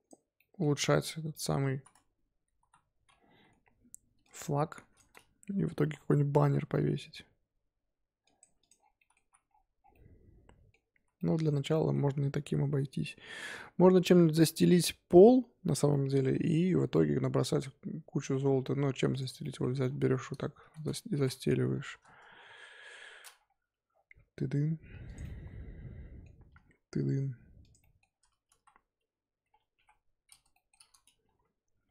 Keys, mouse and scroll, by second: 0.3 middle click, 1.3 click, 1.7 z, 2.3 s, 4.7 click, 5.7 s, 8.4 Tab, 8.6 click, 8.7 scroll down 1, 8.9 middle drag, 9.2 z, 9.5-9.9 scroll down 7, 9.9-10.9 middle drag, 10.9 z, 11.1 middle drag, 11.4 z, 11.7-14.3 middle drag, 14.3-15.9 scroll up 3, 15.9-16.6 middle drag, 16.6-16.9 scroll down 2, 16.9-18.6 middle drag, 18.6-19.1 scroll down 3, 19.1 click, 19.4 middle drag, 19.7-20.6 scroll up 1, 20.6 shift+d, 21.1 r, 22.3 scroll down 2, 22.4 scroll up 1, 22.7 KP_7, 23.3 scroll up 1, 24.0 g, 25.2 middle click, 26.1 scroll up 1, 26.4 g, 27.8 middle drag, 28.1-28.5 scroll up 3, 28.5 KP_1, 29.7 KP_3, 30.5 shift+middle click, 30.7-31.2 scroll up 3, 31.2 g.